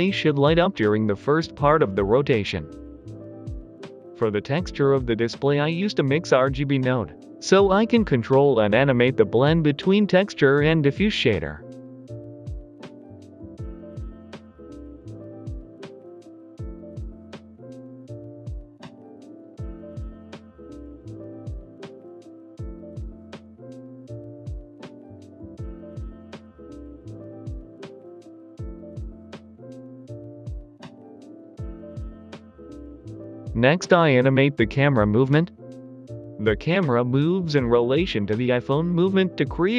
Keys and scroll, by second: 22.0 Escape, 25.8 Escape, 27.9 g, 28.0 x, 31.7 Right, 31.9 Right, 32.3 Right, 32.6 Right, 32.9 Right, 33.2 Right, 33.5 Right, 33.8 Right, 34.1 Right, 34.4 Right, 37.1 typing.